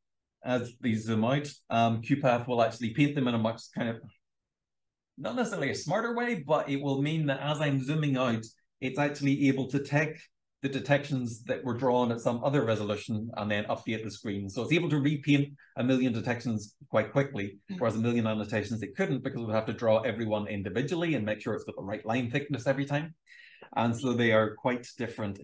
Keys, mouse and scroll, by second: 1.2-1.8 scroll down 2, 1.8-5.0 scroll down 1, 5.0-10.7 scroll down 1, 10.7-15.8 scroll down 1, 15.8-21.0 scroll down 1, 21.0-25.1 scroll down 1, 25.1 ctrl+scroll down 1.